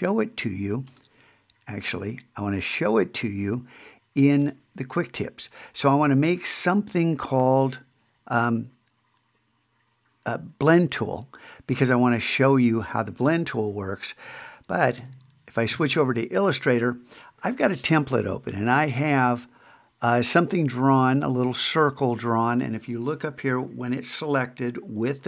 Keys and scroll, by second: 15.0 super+Tab.